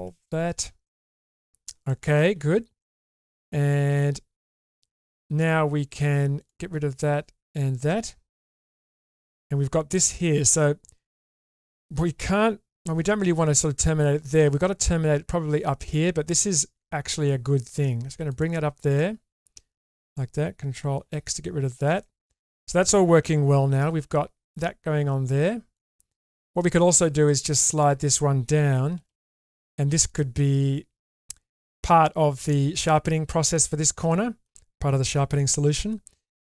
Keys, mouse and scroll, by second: 0.5 ctrl+x, 0.8 middle click, 1.9 shift+middle click, 2.8 middle click, 6.3 click, 7.5 shift+click, 8.6 ctrl+x, 9.1 middle click, 9.9 middle click, 12.9 k, 18.9 click, 19.8 click, 20.9 ctrl+x, 21.7 shift+middle click, 22.0 middle click, 23.9 ctrl+r, 25.7 click, 26.1 middle click, 27.3 middle click, 28.9 g, 30.3 middle click, 32.5 middle click, 33.3 middle click, 34.1 middle click, 35.6 ctrl+r.